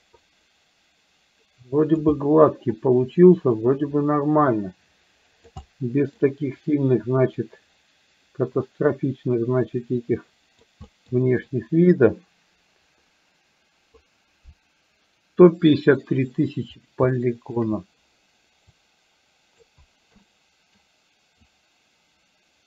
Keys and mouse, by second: 2.2 middle click, 2.7-5.7 drag, 5.8 middle click, 6.7-10.7 drag, 10.9 middle click, 11.5-14.0 drag, 17.2 shift+middle click, 18.8 click, 20.3 middle click, 21.5-22.6 drag.